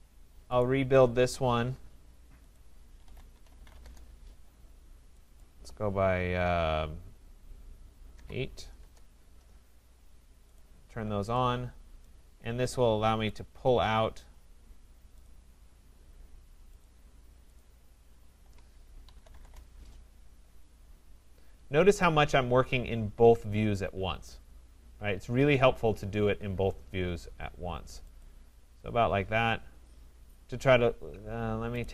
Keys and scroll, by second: 3.8 Return, 8.8 Return, 19.4 Return.